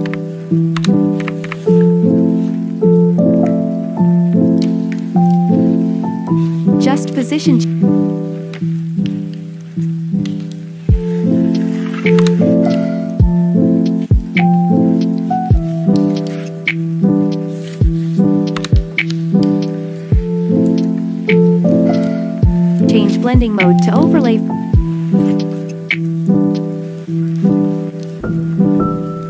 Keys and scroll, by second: 0.0-1.4 typing, 12.2 space, 18.6 space.